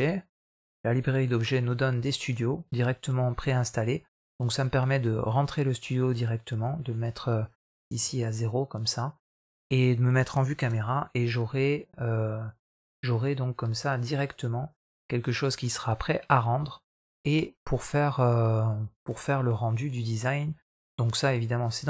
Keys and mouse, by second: 14.6 KP_0.